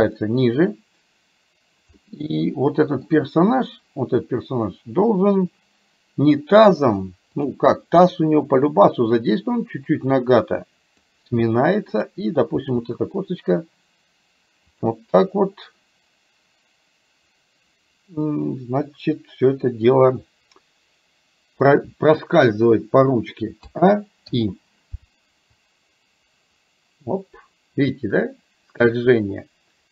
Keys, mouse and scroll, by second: 2.0-3.1 middle drag, 8.7-11.2 drag, 12.1 click, 12.6 r, 18.2-20.0 middle drag, 23.7 a, 24.5 i, 25.7-29.9 drag.